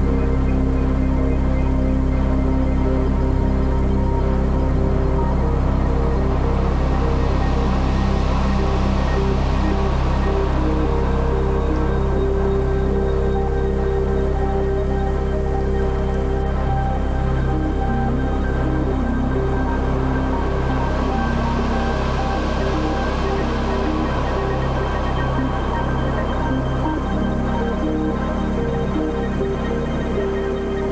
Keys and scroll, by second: 2.2 ctrl+z.